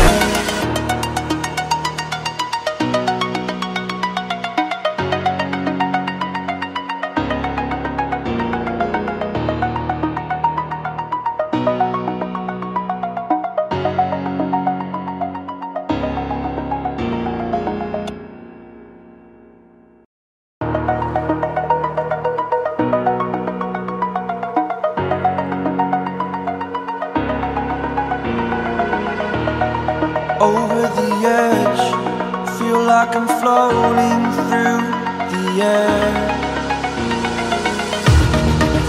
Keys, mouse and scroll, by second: 0.4 scroll down 1, 0.7-1.6 scroll up 1, 1.6 click, 2.7-3.1 scroll down 1, 3.3-3.6 scroll up 1, 4.6 click, 4.9 scroll down 1, 5.2 scroll up 1, 6.0 click, 6.9-7.6 scroll up 1, 7.6-9.1 drag, 10.2 scroll up 1, 10.4 scroll down 1, 11.0 scroll up 1, 12.3 click, 13.5-13.8 scroll up 1, 13.8 click, 15.2 scroll up 1, 15.3 scroll down 1, 15.6 scroll up 1, 16.2 click, 17.2 scroll down 1, 17.5 ctrl+z, 17.8 scroll up 1, 18.1 ctrl+z, 19.4-20.8 drag, 20.8 scroll down 1, 21.2-22.0 scroll up 1, 22.3 click, 23.9 scroll up 1, 24.8 click, 25.2 scroll up 1, 25.7 click, 25.9 scroll down 1, 26.0 scroll up 1, 26.7 click, 28.1 scroll down 1, 28.7-29.1 scroll up 2, 29.7-31.4 drag, 31.4 scroll down 1, 31.8 scroll up 1, 32.5 click, 34.3 scroll down 1, 34.7 scroll up 1, 35.2-36.6 drag, 36.6-36.9 scroll down 1, 36.9 scroll up 1, 37.6-38.8 drag.